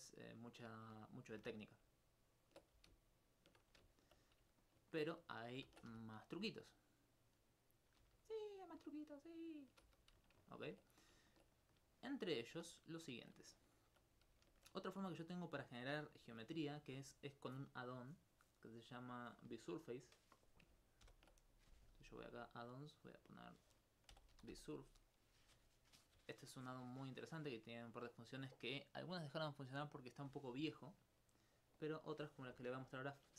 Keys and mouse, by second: 0.9 right click, 2.6 ctrl+click, 3.4 shift+click, 4.0 alt+click, 4.6 alt+click, 5.9 ctrl+1, 6.1 right click, 7.2 click, 8.0 e, 8.7 click, 9.4 shift+right click, 9.6 shift+right click, 9.9 shift+f, 10.3 alt+click, 21.1 ctrl+alt+u, 22.5 click, 24.2 b, 24.4 s, 24.4 u, 28.4 middle click, 29.9-30.9 right drag, 31.8-33.3 drag.